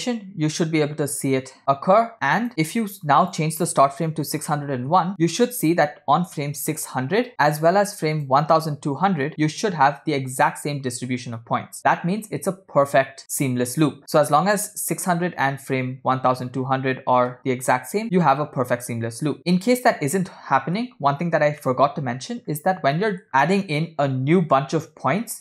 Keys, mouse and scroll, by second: 0.0 space, 1.6-2.7 drag, 2.5 space, 3.4-5.1 drag, 5.7-7.0 drag, 6.6 0, 8.3-10.3 drag, 9.3 0, 16.6-18.4 drag, 18.0 0, 19.4-21.0 middle drag, 21.8 middle click, 22.7 scroll up 2, 23.0 middle click, 23.3 scroll up 1.